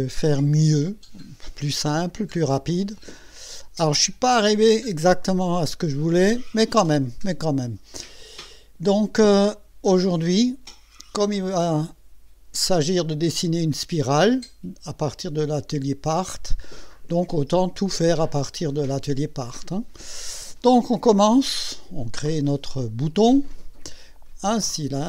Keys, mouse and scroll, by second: 8.2 click, 22.7 click, 24.6 click.